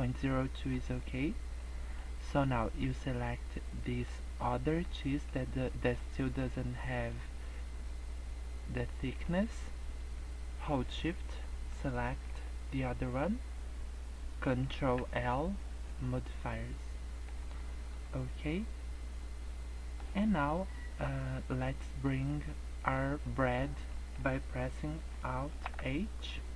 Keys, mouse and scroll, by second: 0.3 middle click, 0.8 scroll up 1, 1.2 middle click, 1.9 middle click, 3.9 click, 5.7 middle click, 6.2 middle click, 6.9 middle click, 9.0 middle click, 11.7 shift+click, 14.8 ctrl+l, 16.6 middle click, 17.5 scroll down 3, 17.6 middle click, 17.9 scroll up 2, 18.2 middle click, 20.1 scroll down 1, 20.2 middle click, 22.3 middle click, 23.2 middle click, 23.2 scroll down 3, 23.6 scroll up 1, 23.9 middle click, 25.5 alt+h.